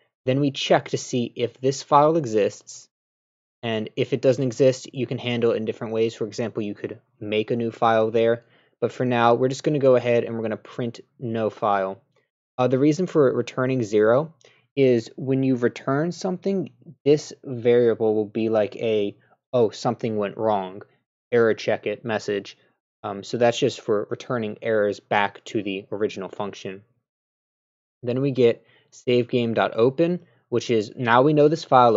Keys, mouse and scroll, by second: 2.5 click, 9.8 click, 13.2-14.4 drag, 28.1 click.